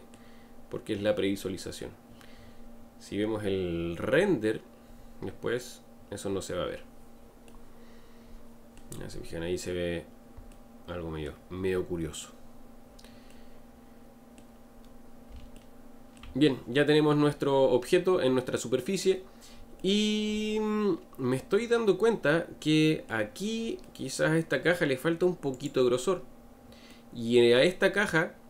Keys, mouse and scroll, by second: 2.7-3.2 scroll down 3, 3.8-4.2 scroll down 3, 4.9-5.9 scroll up 1, 7.4-11.6 middle drag, 11.6 scroll up 2, 12.4-13.3 scroll up 3, 13.3-14.8 middle drag, 14.8 scroll down 2, 15.5-25.6 shift+middle drag, 25.6 click, 26.9-28.4 middle drag.